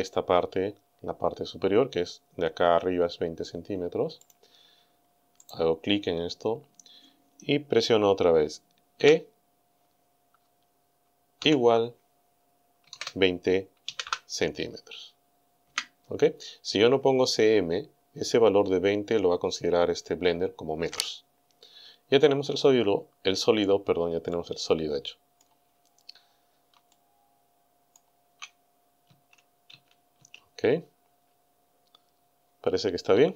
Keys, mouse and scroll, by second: 4.3 click, 5.5 right click, 9.0 e, 11.4 shift+0, 12.9 KP_2, 13.0 KP_0, 13.9 c, 14.1 m, 15.7 KP_Enter, 22.7 scroll down 2, 24.3-25.6 middle drag, 25.8 scroll down 2, 26.9-28.2 shift+middle drag, 29.1 a, 31.2 scroll up 2, 31.6 scroll down 2.